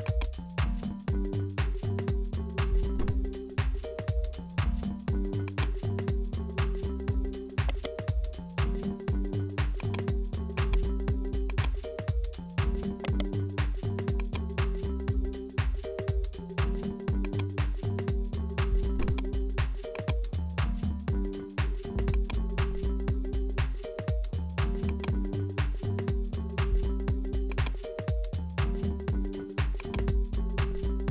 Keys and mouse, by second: 0.8-4.4 drag, 4.4 Tab, 5.5 click, 6.6 alt+h, 7.7 right click, 8.4 g, 10.5 click, 11.5 click, 12.0 r, 13.7 g, 15.2 g, 17.7 s, 19.5 g, 20.7 r, 22.5 g, 25.9 r, 27.7 g, 30.5-31.1 drag.